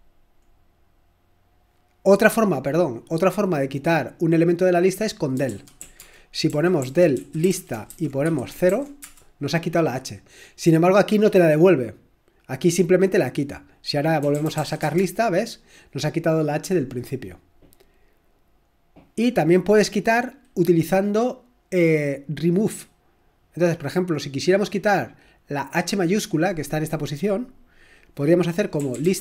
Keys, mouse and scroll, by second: 5.6-9.0 typing, 14.0-15.1 typing, 27.4-29.1 drag, 29.0-29.2 typing.